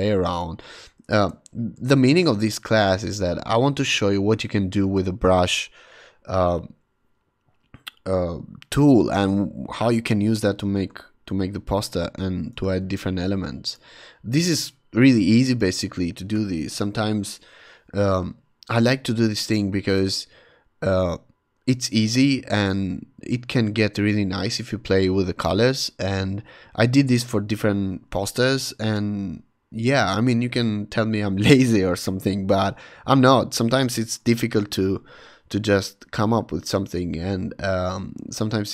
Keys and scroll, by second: 1.1 Return, 1.8 v, 11.3 shift+super+h, 12.8 super+t, 17.1 Return, 17.3 v.